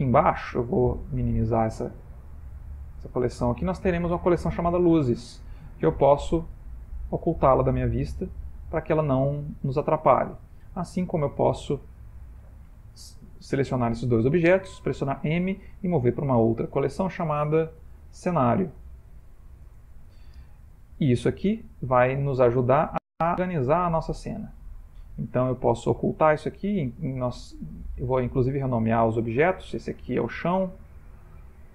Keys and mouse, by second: 0.2 middle click, 1.4 middle click, 2.3 click, 4.9 click, 6.8 click, 8.0 middle click, 11.4 click, 12.9 shift+click, 14.8 m, 24.2 click, 26.4 click, 26.6 click, 27.9 click, 28.9 click, 30.8 click, 30.9 click.